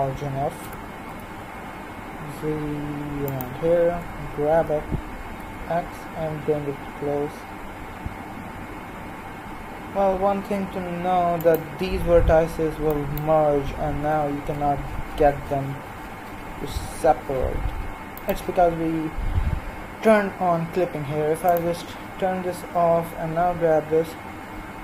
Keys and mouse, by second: 0.6 g, 3.9 g, 12.8-14.6 right drag, 14.0 g, 23.4 g.